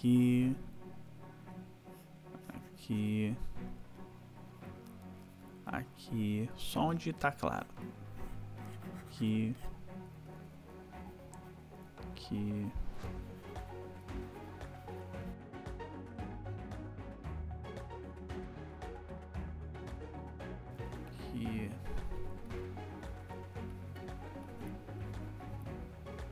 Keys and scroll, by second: 1.1 ], 3.5 ], 5.7 ], 6.3 \, 10.1 ], 15.4 ], 17.1 \, 18.2 \, 20.3 \.